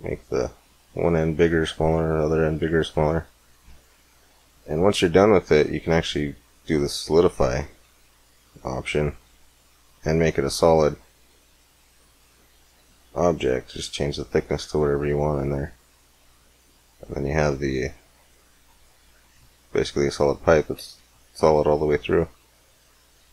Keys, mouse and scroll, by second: 1.7-3.5 drag, 5.3-7.1 drag, 7.7-9.9 middle drag, 9.9-10.7 scroll up 1, 12.0-13.9 drag, 13.9-15.8 middle drag, 18.7 middle click, 20.6 z, 21.4 middle click, 23.1 middle click.